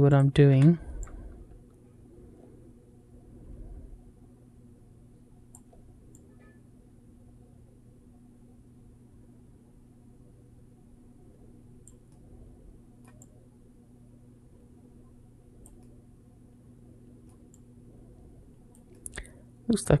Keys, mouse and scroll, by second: 0.3 n, 0.8 click, 5.9 click, 11.9 middle click, 13.0 click, 15.6-17.1 middle drag, 17.3 click, 18.7 middle click.